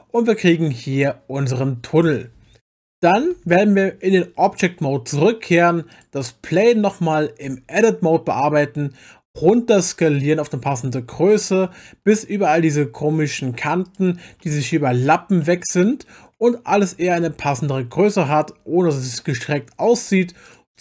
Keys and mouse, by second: 0.9-1.9 middle drag, 3.3 Tab, 5.9 click, 7.4 Tab, 9.3 s, 13.8 click, 15.4 middle click, 16.7 s, 20.5 click.